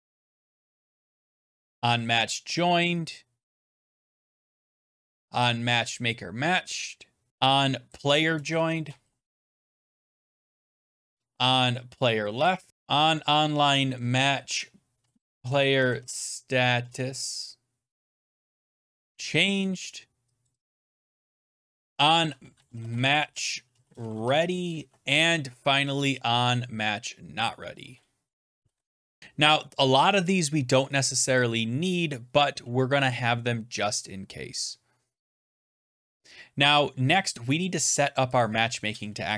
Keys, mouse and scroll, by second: 0.0-5.7 typing, 1.9 click, 3.4 click, 5.9 click, 7.0-10.6 typing, 7.3 click, 7.8 click, 10.6 click, 12.1 click, 12.7 click, 13.8 click, 14.6-16.8 typing, 18.0-19.4 typing, 19.5 click, 20.4 click, 20.6 click, 20.8 click, 21.7 click, 22.2-24.6 typing, 25.1 click, 25.8-26.5 typing, 27.2 click, 27.9-29.6 typing, 29.2 scroll down 10, 31.3 click, 34.6-36.3 scroll down 10, 36.4 scroll, 37.5 click, 38.3 click, 38.9 Return, 39.1 Return.